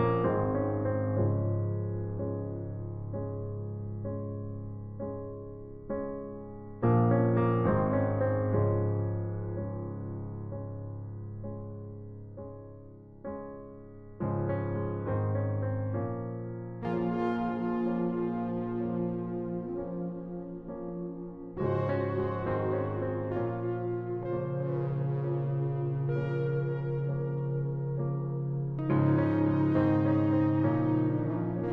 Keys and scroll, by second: 14.0 space.